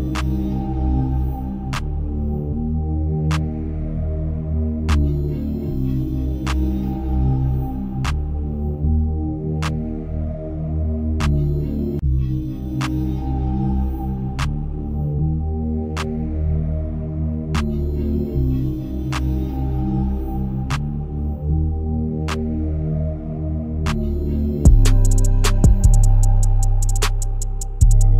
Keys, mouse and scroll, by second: 1.6 s, 6.3 g, 7.2 KP_0, 8.8 g, 13.4-14.5 middle drag, 14.5 click, 15.0 KP_0, 15.8-17.0 scroll down 5, 17.0 scroll down 1, 17.2 s, 19.2-20.1 scroll up 5, 20.1 scroll up 1, 20.8 g, 23.2 click.